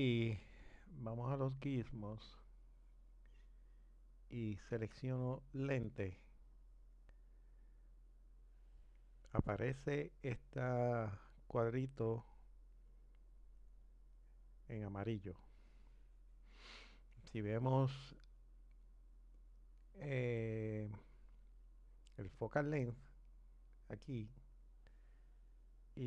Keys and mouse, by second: 6.2-9.1 drag, 25.5 click.